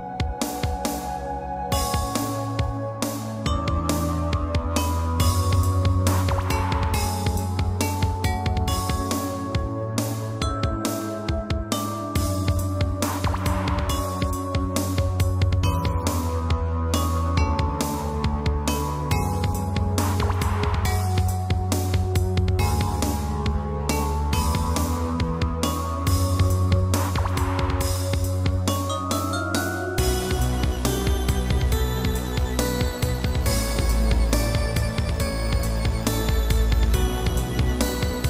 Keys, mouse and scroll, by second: 1.4 click, 2.4 shift+click, 2.9 g, 4.1 click, 4.3 click, 5.6 shift+space, 6.3 Escape, 6.8 shift+space, 7.5 Escape, 8.6 click, 11.6 shift+click, 13.0 click, 15.1 g, 16.3 click, 16.4 click, 17.7 g, 19.8 click, 20.4 click, 21.7 shift+space, 22.8 Escape, 23.4 shift+space, 24.3 Escape, 25.5 shift+click, 26.5 g, 29.4 click, 29.9 shift+space, 31.2 Escape, 32.4 click, 32.6 click, 33.9 click, 34.2 click, 35.3 click, 36.4 shift+space, 37.5 Escape.